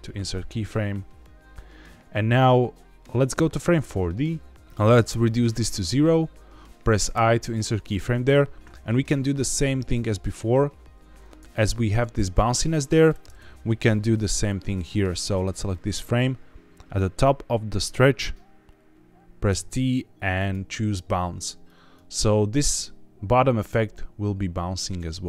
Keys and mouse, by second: 1.1-3.7 drag, 5.2 click, 9.4 middle click, 11.5-13.0 drag, 14.1 click, 15.7 middle click, 17.5 middle click, 19.4 t, 21.6-21.9 drag, 22.0-25.2 drag.